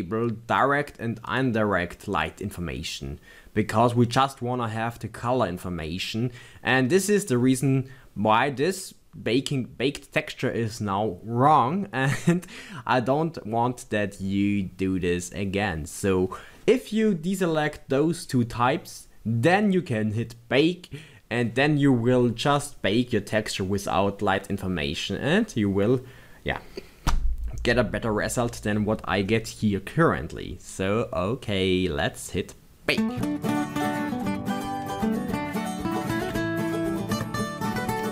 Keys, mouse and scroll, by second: 0.8 click.